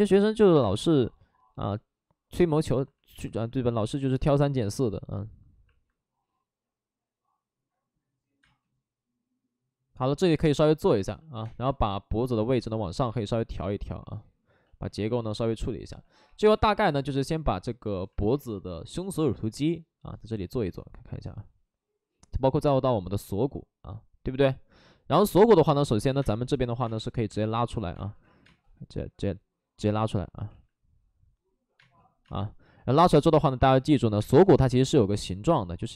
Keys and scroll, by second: 0.0 space, 0.6 space, 8.4 space, 11.4 space, 11.6 1, 12.3 ctrl+z, 12.9 2, 16.2 3, 26.1-28.4 typing, 28.2 ctrl+z, 29.7 ctrl+z, 31.7 space, 33.6 alt+s, 34.1 space.